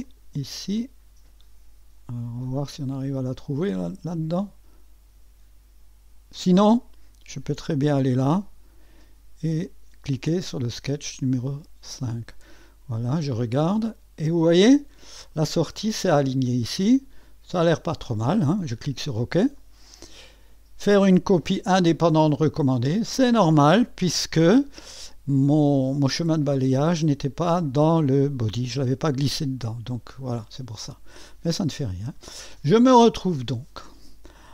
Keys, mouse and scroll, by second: 0.0-1.3 drag, 2.8-4.0 drag, 7.5 click, 9.6 click, 11.9 click, 13.8-15.4 drag, 17.2-18.2 drag, 19.4 click, 19.8-21.3 drag, 23.6 click, 29.3 scroll down 1, 31.2 click, 32.7-33.9 drag.